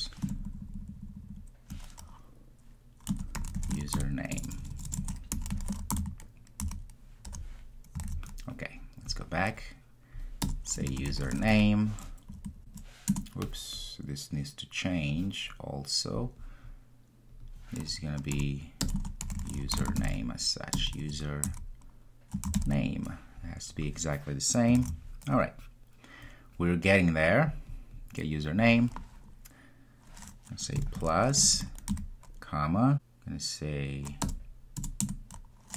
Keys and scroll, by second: 8.1 super+s, 13.1 Return, 24.8 super+s.